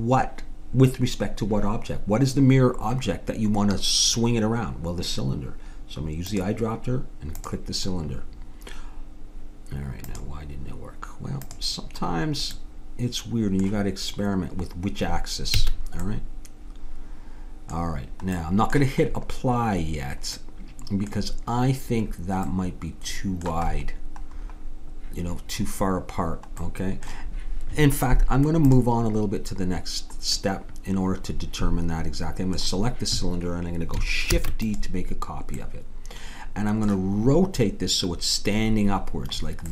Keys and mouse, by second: 6.3-8.1 drag, 10.1-13.2 drag, 13.5-15.6 middle drag, 15.6 a, 16.1 middle click, 20.5-28.6 middle drag, 28.6-30.6 drag, 34.3 shift+d.